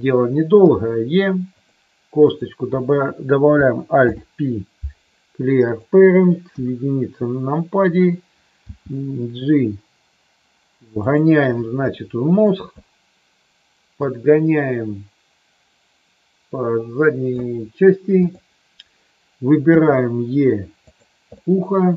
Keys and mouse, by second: 0.6 e, 1.5 click, 2.2 click, 4.0 alt+p, 6.5 KP_1, 8.7 g, 12.0 middle click, 14.0-17.2 drag, 18.1 click, 19.6 e, 20.7 click, 21.3-21.9 middle drag.